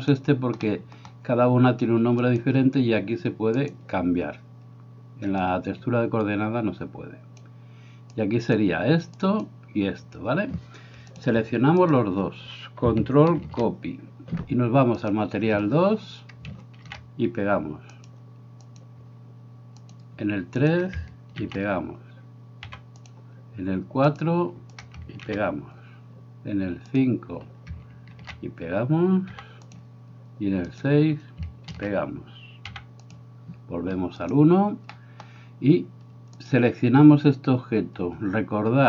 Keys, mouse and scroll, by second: 0.7 middle click, 2.2-3.7 drag, 5.5-7.5 drag, 8.2 click, 9.3 click, 11.2 click, 11.9 shift+click, 13.4 ctrl+c, 16.9 ctrl+v, 18.7-20.9 drag, 21.4 ctrl+v, 22.7 g, 24.8 click, 25.2 ctrl+v, 26.9 click, 28.2 ctrl+v, 29.4 g, 30.6 click, 31.8 ctrl+v, 32.7 g, 34.2 click, 35.0 middle click, 36.4-38.8 drag.